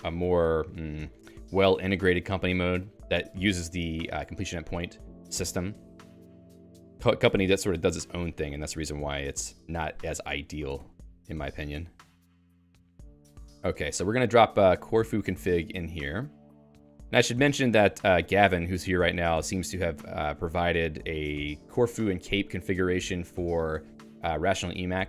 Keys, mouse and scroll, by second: 1.1 Escape, 12.3 click, 14.8 Down, 15.0-15.9 Down, 16.1 Down, 16.2 Down, 16.4 Return, 17.8 i, 18.0 Escape, 18.5 i, 18.8 Return.